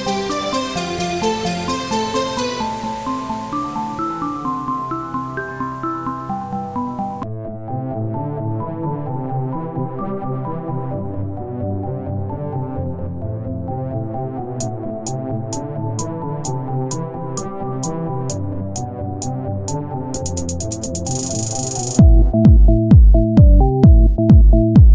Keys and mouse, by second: 2.2-3.5 drag, 3.2 ctrl+z, 3.6 s, 7.7 e, 9.5 ctrl+z, 10.1 e, 14.0-15.7 drag, 15.7 e, 17.9 r, 23.0 e.